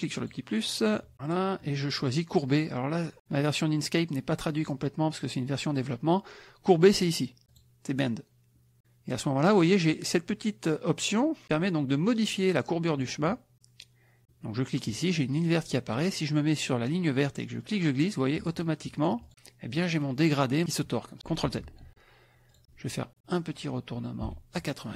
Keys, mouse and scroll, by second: 1.2 click, 7.5 click, 12.9 click, 17.6-19.3 drag, 21.7 ctrl+z, 22.5 click, 23.6 click, 24.2-24.9 ctrl+drag.